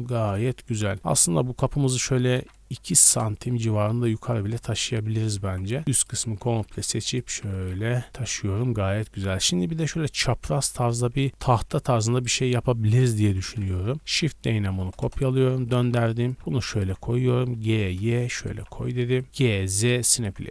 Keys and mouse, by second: 0.4 Tab, 0.4-2.1 middle drag, 1.0 g, 2.0 g, 2.1 click, 2.9-4.9 middle drag, 4.4 Tab, 4.8-8.4 typing, 7.8 ctrl+click, 8.1 Tab, 11.1 Tab, 11.7 3, 13.2 ctrl+l, 13.8 KP_3, 13.9 shift+click, 14.0 shift+d, 15.6 g, 16.3 g, 16.6 ctrl+click, 17.2 g, 17.9-19.1 ctrl+middle drag, 18.5-19.2 typing, 19.1 click, 19.2-20.5 middle drag.